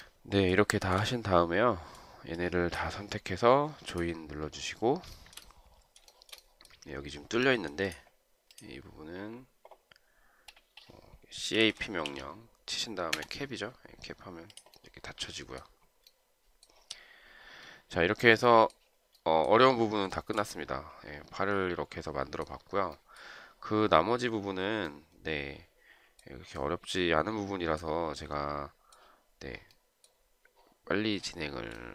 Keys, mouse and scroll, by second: 1.0 shift+right click, 5.4 shift+right click, 6.4 shift+right click, 11.6-12.9 typing, 13.4 Return, 20.4 shift+right click.